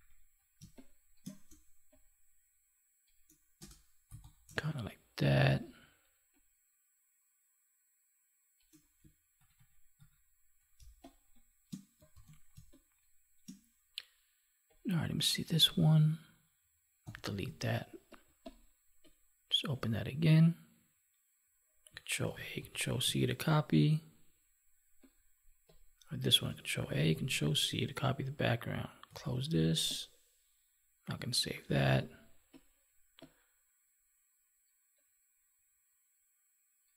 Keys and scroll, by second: 9.3 ctrl+=, 10.7 space, 12.0 ctrl+s, 12.5 space, 17.0 Delete, 17.5 alt+Tab, 22.1 ctrl+a, 23.0 ctrl+w, 26.7 ctrl+a, 29.0 ctrl+w, 31.6 ctrl+v.